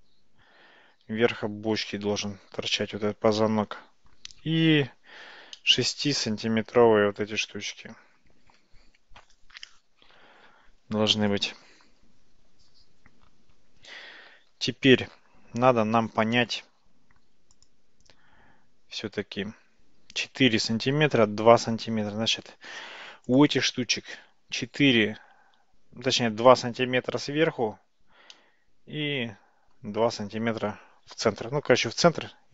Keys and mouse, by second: 3.4-4.2 middle drag, 5.6-6.2 shift+middle drag, 23.4 click, 28.4-29.8 middle drag.